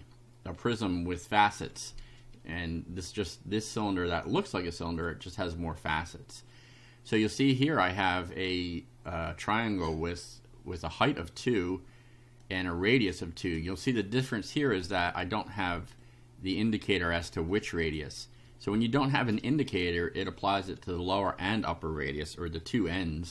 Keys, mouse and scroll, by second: 3.8-5.2 right drag, 10.8 click, 12.4 click, 13.5 click, 14.3-15.4 drag, 16.0 click, 17.5 click, 19.3 click.